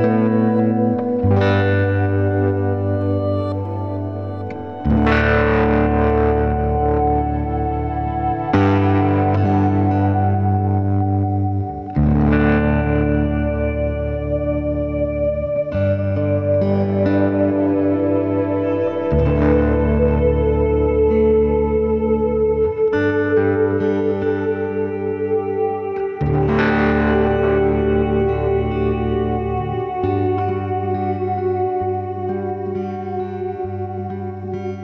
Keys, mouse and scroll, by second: 0.4 middle drag, 0.7-1.5 scroll down 3, 0.9 middle drag, 1.5 scroll up 2, 1.8-2.5 middle drag, 2.5 click, 3.1 shift+drag, 4.5 g, 6.7 x, 7.8 ctrl+z, 8.2 click, 8.8 ctrl+z, 9.1 ctrl+z, 9.6 click, 10.3 x, 10.9 drag, 11.3 shift+click, 11.9 g, 16.6 click, 16.9-17.4 middle drag, 17.7 shift+click, 17.9-18.4 middle drag, 18.4 shift+drag, 18.7-19.8 middle drag, 19.8 g, 21.4-23.4 middle drag, 24.5 click, 24.7-25.5 scroll down 6, 24.9 middle drag, 25.5-27.5 middle drag, 27.5-27.9 scroll up 1, 27.9 click, 28.3-28.9 scroll down 4, 28.9 s, 29.6-30.5 scroll up 7, 30.5-31.8 middle drag, 31.8 drag, 32.2-32.6 scroll up 1, 32.6 r.